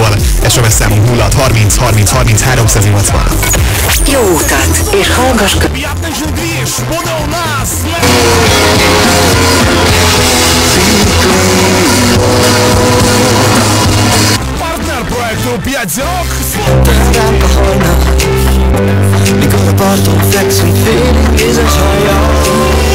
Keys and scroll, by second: 6.4 Page_Down, 15.2 Page_Down.